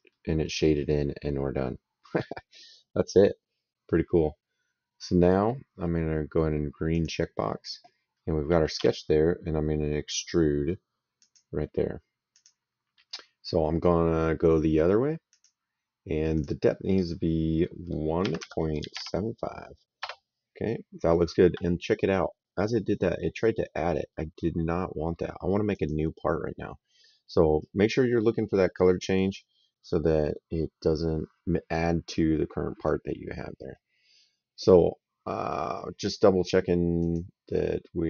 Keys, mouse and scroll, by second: 6.8 click, 8.6 s, 11.0 click, 12.2 click, 15.2 click, 18.0 KP_1, 18.2 KP_Decimal, 18.6 KP_7, 18.8 KP_5, 20.0 Return, 25.6 click, 28.4 middle click, 36.9 click.